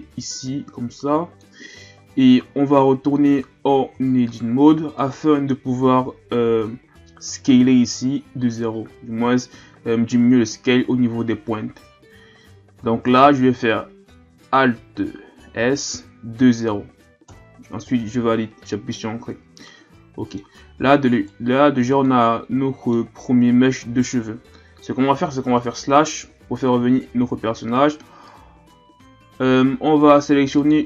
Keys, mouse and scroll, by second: 1.9-2.3 shift+scroll up 5, 2.9-3.2 scroll up 2, 3.2 Tab, 4.0-5.0 shift+scroll up 3, 5.0 right click, 6.9 middle click, 7.1 alt+s, 15.5 alt+s, 19.7-21.1 middle drag, 21.1 right click, 21.6-22.1 scroll down 1, 22.1-25.1 middle drag, 25.6 KP_Divide, 27.0-27.7 shift+scroll up 5, 28.2 a, 28.7 a, 30.6-30.8 drag.